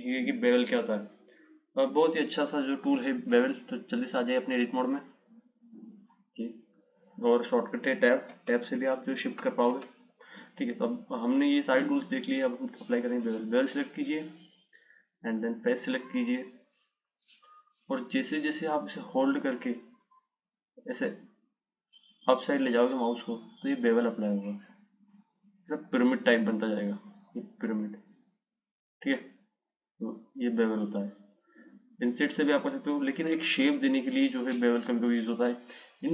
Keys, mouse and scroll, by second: 4.7-7.8 drag, 8.6 Tab, 9.0 Tab, 10.0 Tab, 13.5-16.5 drag, 18.4 click, 35.4-36.1 drag.